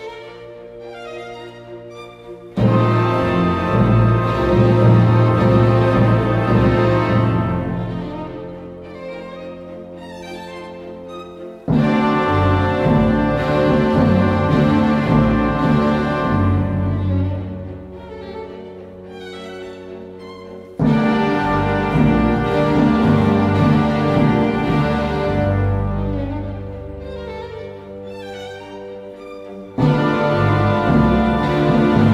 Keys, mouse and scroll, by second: 7.0-8.9 typing, 7.0 double click, 15.4 space, 19.4 double click, 24.0 double click, 29.6-30.3 alt+scroll down 1, 31.1 alt+scroll, 31.1 space.